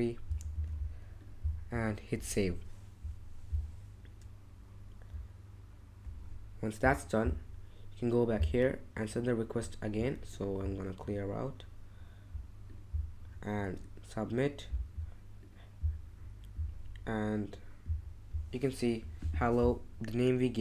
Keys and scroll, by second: 0.5 super+v.